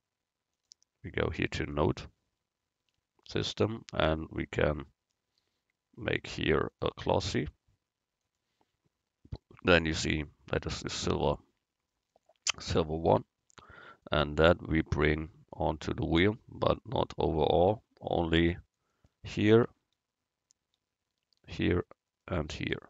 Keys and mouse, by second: 1.6-5.2 middle drag, 4.6-6.4 drag, 4.6 right click, 6.8-8.7 drag, 13.6 Tab, 21.4-22.8 right drag.